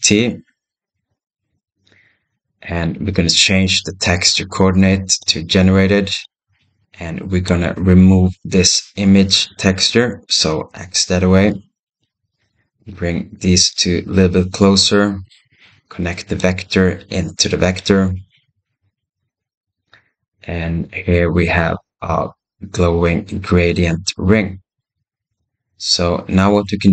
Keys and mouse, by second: 1.6 middle click, 5.1-7.5 drag, 11.8-12.3 drag, 14.2 middle click, 14.4 middle click, 14.6 middle click, 16.2 click, 16.7-17.6 middle drag, 21.1 click.